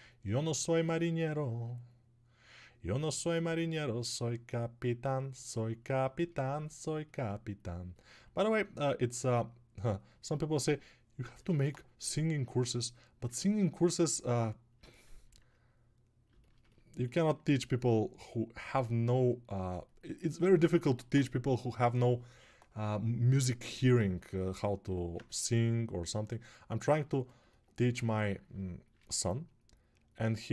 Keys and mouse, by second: 26.9-30.5 ctrl+alt+drag, 26.9-30.5 ctrl+alt+middle drag, 26.9-30.5 ctrl+alt+right drag.